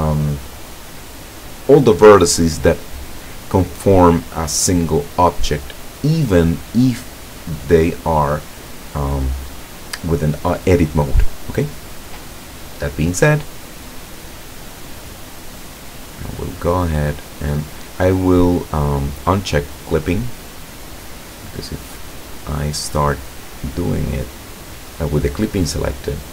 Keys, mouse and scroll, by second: 15.4-17.5 drag, 19.9 click, 21.0-22.4 drag, 22.9 middle click, 23.4-25.3 right drag.